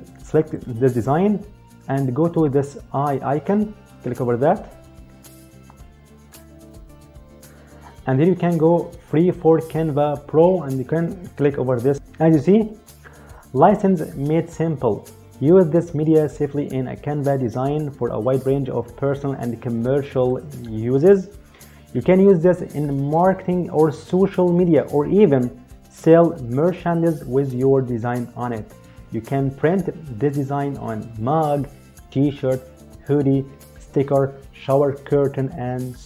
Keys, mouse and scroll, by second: 0.3 click, 4.1 click, 11.9 click, 20.0 click.